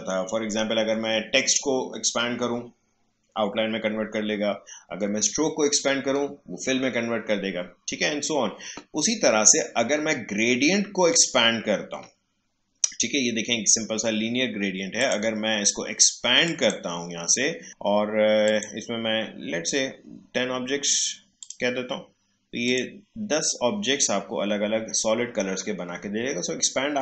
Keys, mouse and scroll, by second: 11.1 click, 15.1 click, 19.0-21.2 scroll up 1, 21.4 click, 21.7-22.4 scroll up 1, 22.6 click, 22.7 click.